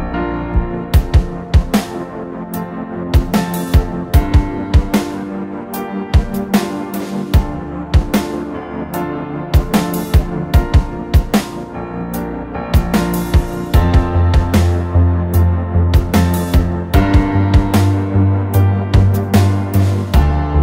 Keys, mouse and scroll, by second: 5.0 alt+click, 7.9 alt+BackSpace, 9.4 ctrl+d, 10.7 Down, 12.1 Right, 12.8 Right, 14.0 Left.